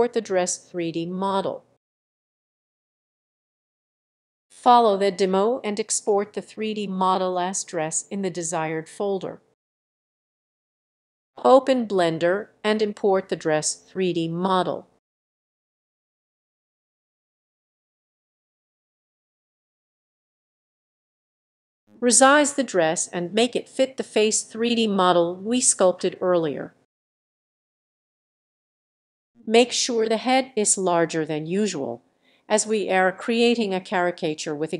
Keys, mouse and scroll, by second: 4.5-6.5 drag, 6.8-7.9 drag, 7.9-8.2 typing, 10.1-11.3 drag, 13.4-15.7 drag, 17.2-19.1 drag, 19.4-20.5 drag, 20.5-22.7 scroll down 4, 22.7 s, 23.1 g, 24.0 scroll down 3, 24.2 s, 25.0 click, 25.3 g, 25.8 click, 26.0-27.1 scroll up 5, 27.1 s, 27.7 click, 27.9-28.5 scroll down 6, 28.5 g, 30.0 click, 30.6-31.5 scroll up 3, 31.5 scroll up 1, 31.7 click, 31.9-32.3 scroll down 2, 32.3 s, 32.7 click, 33.2 g.